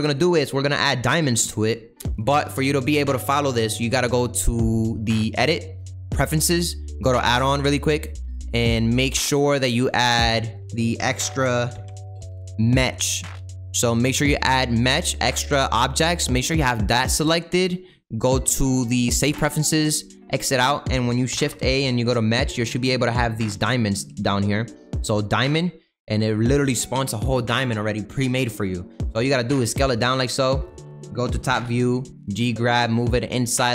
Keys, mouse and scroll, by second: 0.1-6.3 scroll up 2, 6.3-10.9 drag, 25.5-26.0 scroll down 7, 26.0-29.5 middle drag, 29.5 s, 31.2 KP_7, 32.0 g.